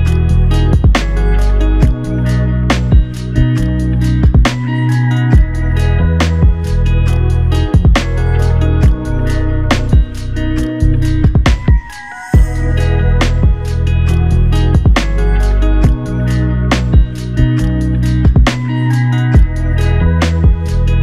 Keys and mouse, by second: 5.1 double click.